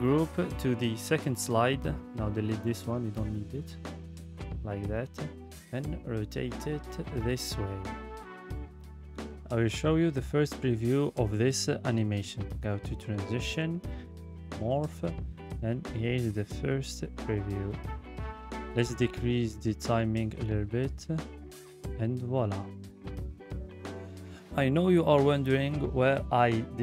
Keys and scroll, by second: 2.4 Delete, 3.1 ctrl+v.